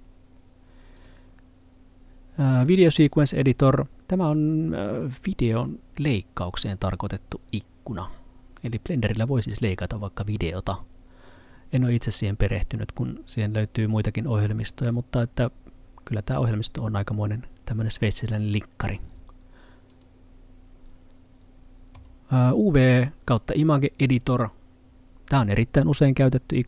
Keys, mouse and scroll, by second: 1.0 click, 19.9 click.